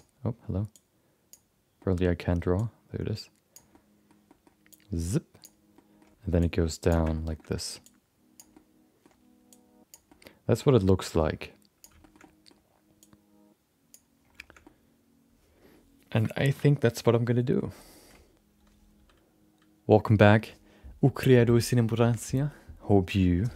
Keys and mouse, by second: 0.9 ctrl+z, 1.2 click, 1.7 middle click, 2.5-3.8 drag, 3.8 middle click, 4.2 middle click, 4.7-5.7 drag, 5.9 middle click, 6.4 click, 7.2 shift+middle click, 7.3 shift+middle click, 7.8 click, 8.6 middle click, 9.5 click, 10.2 middle click, 11.0-12.1 drag, 12.2 middle click, 13.0-14.2 drag, 14.6-17.5 middle drag.